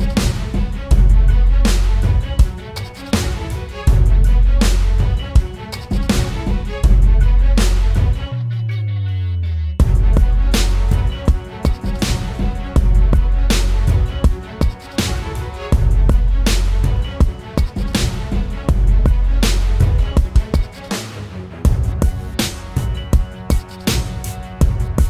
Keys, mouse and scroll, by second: 1.8-3.3 typing, 16.9 ctrl+=, 17.4 ctrl+=, 17.6 ctrl+=, 19.3-20.7 typing, 23.1-23.9 typing.